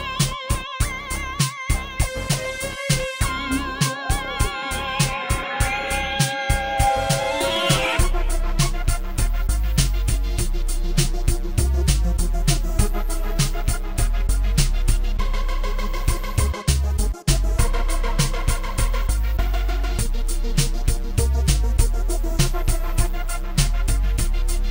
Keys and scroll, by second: 5.0 space, 6.3 ctrl+s, 7.7 space, 8.3 space, 10.1 m, 10.4 BackSpace, 10.8 u, 10.9 s, 14.1-15.6 typing, 18.1 ctrl+d, 21.2 shift+p, 23.3 shift+p.